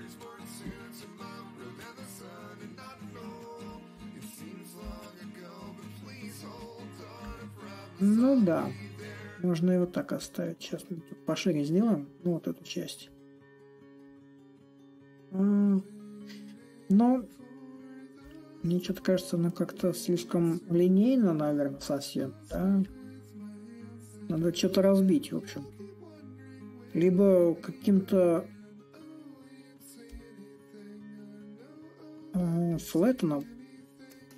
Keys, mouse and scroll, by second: 2.8-7.8 drag, 9.6-14.6 drag, 14.9-19.9 drag, 22.2-24.0 drag, 24.0 a, 25.4-27.1 drag, 27.1 s, 28.9-34.1 drag, 34.3 ctrl+click.